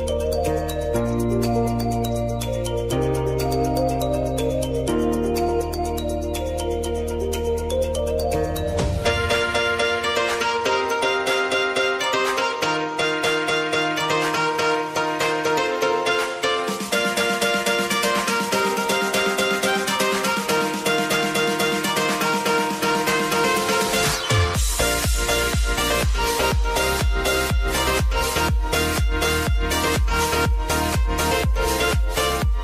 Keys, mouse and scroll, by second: 0.1 p, 1.2 click, 2.3 k, 3.8 click, 4.5 j, 5.9-8.3 drag, 8.3 space, 12.5 space, 13.4 click, 14.4 space, 16.3-18.3 drag, 18.3 k, 19.3 click, 21.5 ctrl+shift+c, 23.8 click, 25.3 ctrl+a, 25.8-27.3 typing, 27.5 Return, 29.4-32.6 drag.